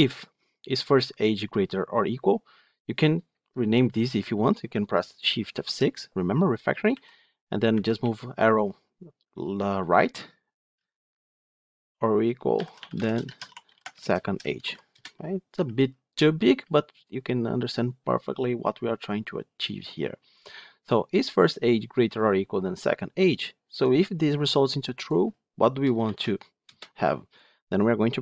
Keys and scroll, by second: 5.4 shift+F6.